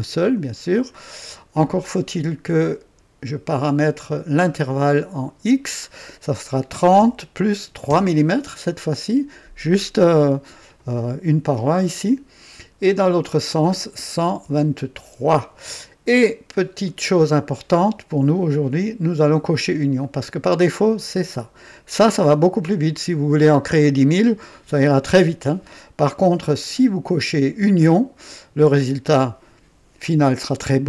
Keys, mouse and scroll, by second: 0.9-1.8 drag, 3.4 click, 6.9 KP_3, 7.8 KP_3, 12.9 click, 14.1 KP_1, 14.4 KP_1, 14.4 KP_2, 15.0 KP_3, 16.8 click, 20.0 click, 20.5 click, 26.6 click, 27.2 click.